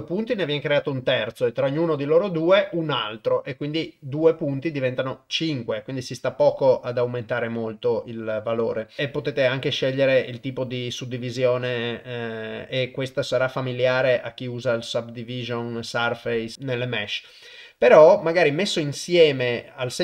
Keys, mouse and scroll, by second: 9.0-9.9 drag, 10.4 click, 11.7-14.9 drag.